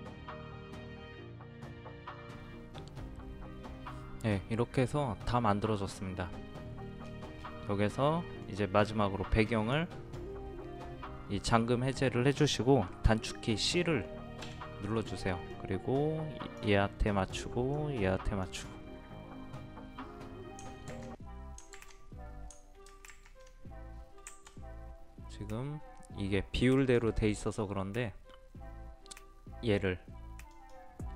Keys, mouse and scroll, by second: 0.1 scroll down 1, 0.1 click, 0.2 right click, 0.4 click, 0.5 ctrl+t, 0.6 click, 0.9 click, 1.5 click, 1.8 scroll down 1, 1.9-7.0 scroll up 2, 7.0-8.4 scroll down 1, 8.4-10.7 drag, 14.4 c, 15.5-16.7 drag, 20.9 ctrl+z, 21.8 ctrl+z, 23.1 ctrl+alt+z, 24.3 Escape, 26.8-31.1 drag.